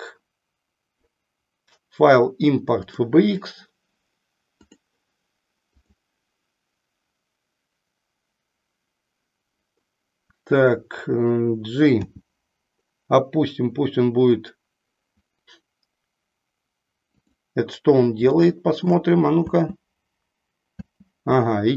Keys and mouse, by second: 4.4 click.